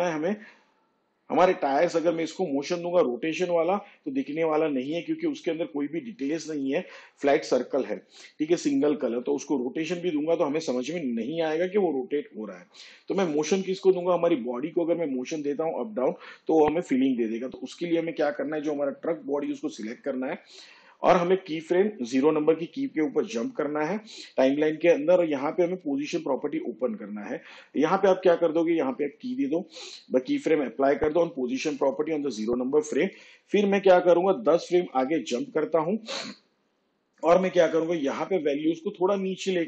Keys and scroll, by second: 28.2 p, 37.0 shift+Page_Down.